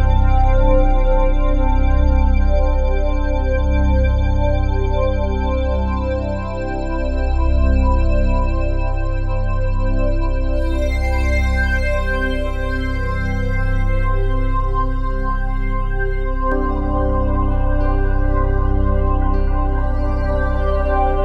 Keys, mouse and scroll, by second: 0.0-0.7 typing, 1.9-3.0 typing, 3.8-5.3 drag, 5.3 typing, 5.4-7.1 drag, 7.2 click, 8.8-12.9 typing, 13.9 Tab, 14.4-15.4 drag, 15.4 Tab, 16.2-18.0 typing, 19.3 Tab, 19.8-20.7 typing.